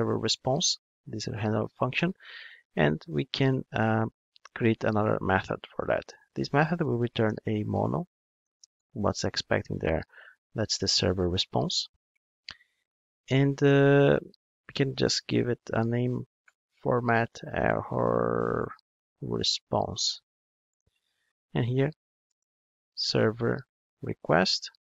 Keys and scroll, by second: 3.5 super+z, 10.8 Return, 12.7 alt+Return.